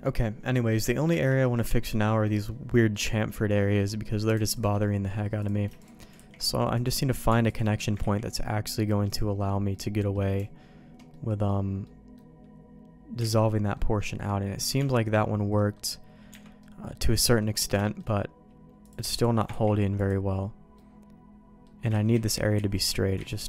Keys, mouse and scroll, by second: 0.0 middle click, 0.5 middle click, 1.1 Tab, 1.4 middle click, 1.8 middle click, 2.2 middle click, 2.9 middle click, 5.4 click, 5.8 shift+click, 6.1 ctrl+e, 7.5 click, 8.0 ctrl+e, 9.7 middle click, 11.1 middle click, 11.8 middle click, 13.2 alt+a, 13.3 middle click, 13.9 middle click, 14.7 Tab, 15.5 middle click, 16.3 Tab, 16.6 middle click, 17.2 middle click, 17.8 shift+middle click, 18.8 click, 19.1 shift+click, 19.5 ctrl+e, 20.7 middle click, 21.9 ctrl+z, 22.1 ctrl+z, 22.3 ctrl+z, 22.6 ctrl+z, 23.3 ctrl+z.